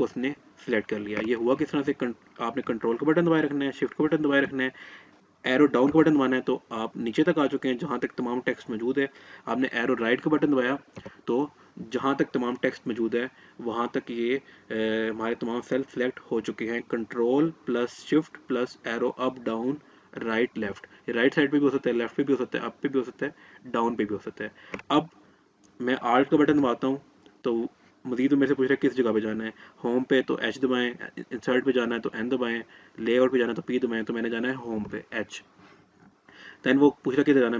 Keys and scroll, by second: 34.2 h.